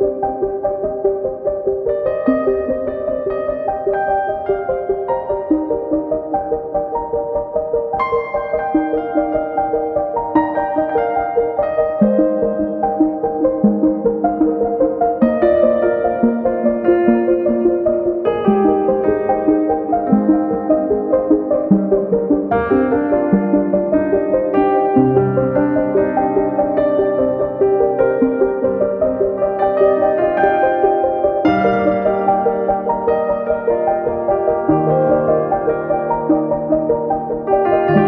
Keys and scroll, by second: 4.3 Page_Up, 5.7 super+c, 5.9 super+v, 13.2 Page_Up, 24.2 d, 27.7 d, 30.9-31.9 typing, 34.0-35.0 typing.